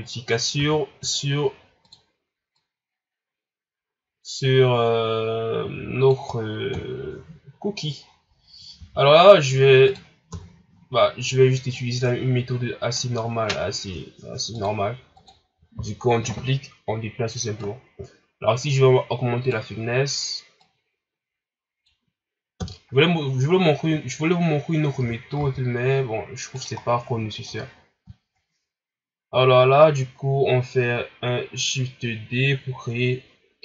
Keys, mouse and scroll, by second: 0.5 r, 2.5-5.5 drag, 6.7 KP_1, 7.5 scroll down 4, 8.0 scroll up 4, 8.7 s, 10.3 KP_3, 11.0-11.7 scroll up 1, 11.7-22.5 drag, 22.5 KP_1, 23.5-24.5 scroll down 3, 24.5-24.9 scroll up 1, 24.9 r, 26.8 scroll down 2, 27.2 shift+scroll up 2.